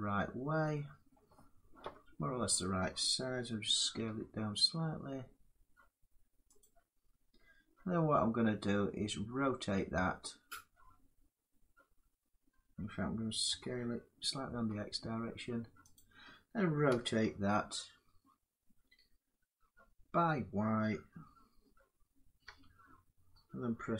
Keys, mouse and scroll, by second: 0.9 middle click, 1.6-2.0 scroll up 1, 2.0 middle click, 2.3-3.7 scroll, 3.7 s, 6.3 click, 13.2 s, 14.3 x, 15.7 click, 16.6 r, 22.2 y.